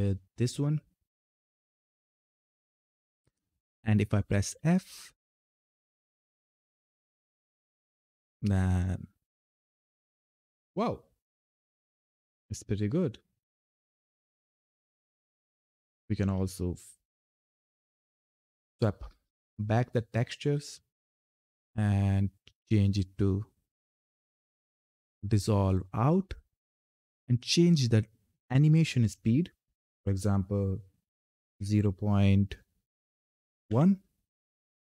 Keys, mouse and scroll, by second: 2.4 ctrl+F10, 4.3 f, 13.3 click, 17.7 click.